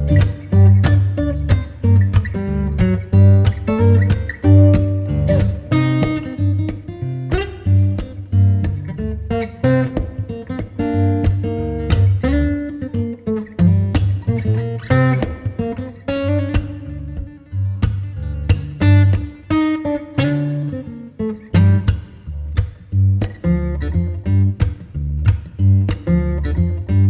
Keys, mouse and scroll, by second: 0.5 Tab, 1.2-2.5 middle drag, 2.5 click, 2.9-4.8 middle drag, 4.8-23.7 drag, 24.1-25.7 drag, 25.7-27.0 scroll down 2.